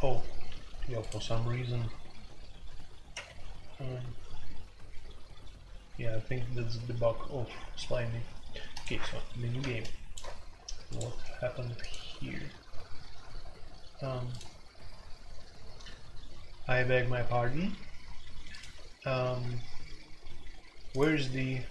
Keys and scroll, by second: 3.1 1.